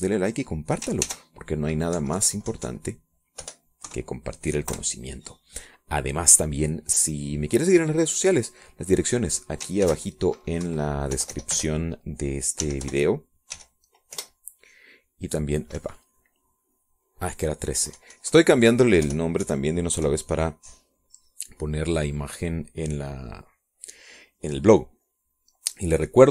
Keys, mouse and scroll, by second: 2.6 ctrl+shift+s, 3.5 Right, 3.7 Left, 4.9 BackSpace, 5.4 KP_3, 6.2 KP_Enter, 11.4 ctrl+shift+s, 12.2 Right, 12.7 BackSpace, 14.2 j, 14.4 p, 15.1 g, 17.3 Escape, 19.3 Left, 20.6 BackSpace, 21.0 KP_3, 21.5 KP_Enter, 22.8 click.